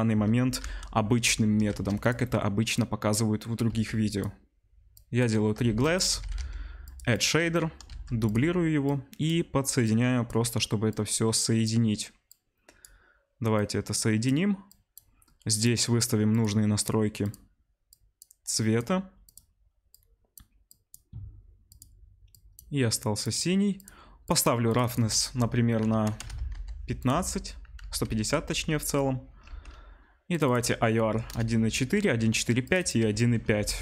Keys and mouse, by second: 0.6 n, 1.7 shift+d, 2.8-4.2 drag, 3.8 shift+d, 4.2 middle click, 4.9-7.2 drag, 5.7 shift+a, 6.3 d, 7.2-8.8 middle drag, 7.9 shift+d, 8.8-15.6 drag, 15.6-30.3 middle drag, 24.2-27.0 drag, 27.8 ctrl+c, 28.5 ctrl+v, 29.4 ctrl+v, 30.3-33.8 drag, 33.6 BackSpace.